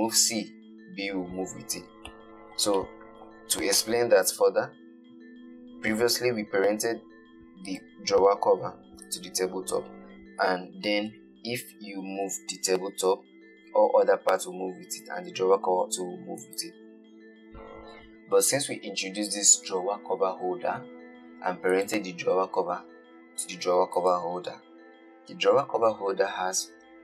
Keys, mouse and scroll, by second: 1.9-2.4 scroll up 4, 2.4-3.8 shift+middle drag, 3.8 scroll down 1, 4.1-7.2 shift+middle drag, 8.0 click, 9.3 click, 12.5 g, 22.0 click, 24.2 click.